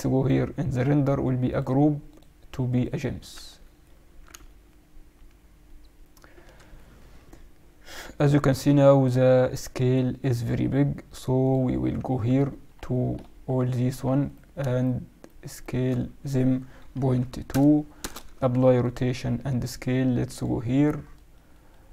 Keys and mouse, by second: 1.4-3.9 drag, 3.6-6.3 middle drag, 11.4-13.3 drag, 12.4-15.1 middle drag, 14.2 right click, 15.1-17.2 drag, 16.1 s, 18.3 ctrl+a, 20.2-21.9 drag.